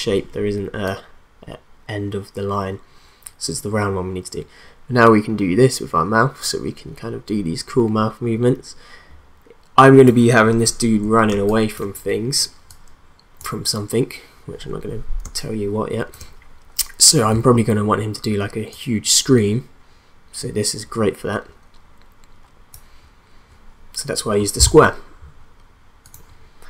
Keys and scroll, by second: 11.3 space, 15.2 space.